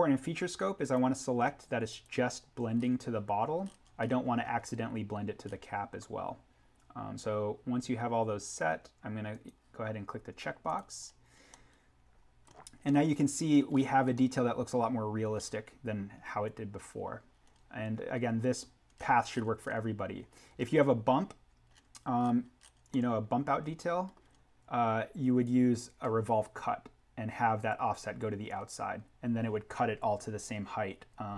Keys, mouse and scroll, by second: 0.8 click, 2.8-3.1 scroll up 1, 9.2 click, 11.0-11.5 scroll down 1, 11.5 middle click, 11.7-12.4 scroll, 12.8 scroll down 1, 12.9 middle click, 13.1-14.0 scroll, 14.0 scroll up 1, 14.1 middle click, 14.4 scroll, 14.9 scroll, 28.5-30.4 scroll up 1.